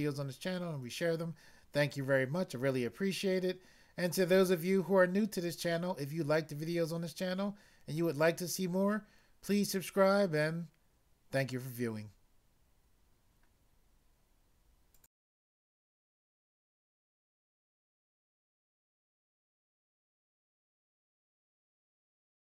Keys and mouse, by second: 15.0 click.